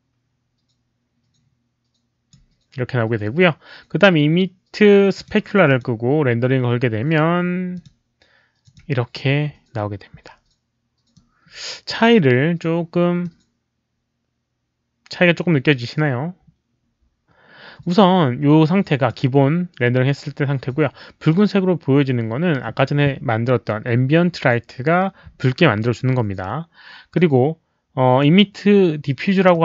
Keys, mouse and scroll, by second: 5.1 click, 5.6 click, 7.7 click, 8.6 click, 9.4 click, 11.1 click, 13.2-19.0 drag, 27.1-28.1 drag, 29.5-29.6 drag.